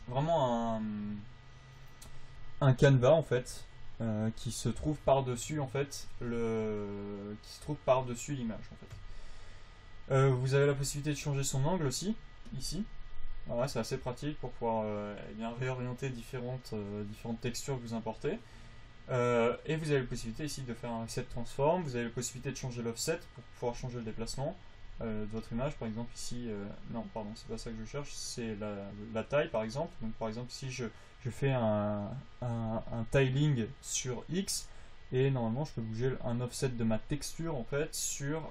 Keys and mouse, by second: 0.2 v, 17.6-20.6 drag, 21.3 click, 23.2 click, 27.1-31.5 drag, 38.1 click.